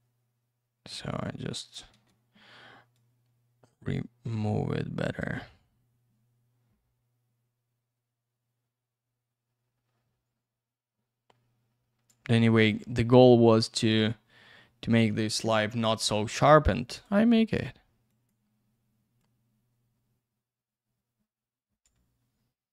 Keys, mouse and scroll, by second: 1.9 ctrl+я, 2.9 click, 5.4 click, 12.6 click, 16.9 right click, 17.0 right click, 18.1 click, 18.3 click, 19.2 click.